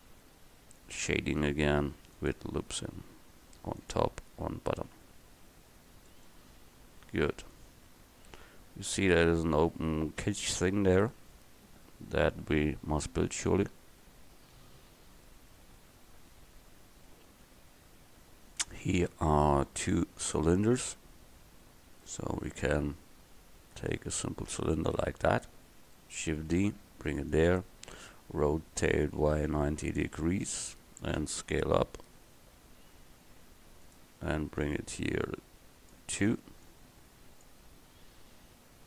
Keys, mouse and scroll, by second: 1.9 ctrl+r, 4.3 Tab, 24.6 right click, 26.5 shift+d, 28.9 r, 31.3 s, 34.7-36.4 drag, 36.7 click.